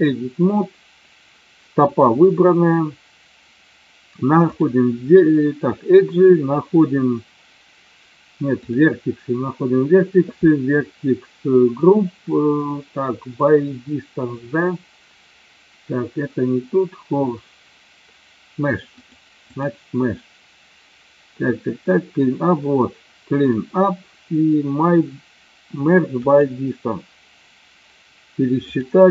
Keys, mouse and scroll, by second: 4.6 click, 19.5 click, 28.7-29.1 drag.